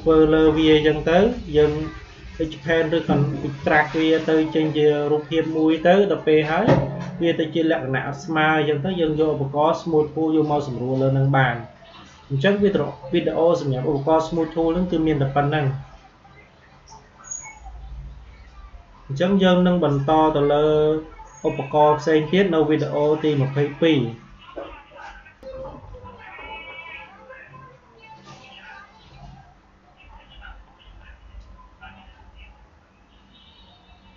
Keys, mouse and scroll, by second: 1.1 Delete, 2.4 click, 3.5 Delete, 5.0 click, 6.2 Delete, 7.8-12.4 drag, 12.4 Delete, 25.3 click, 34.1 click.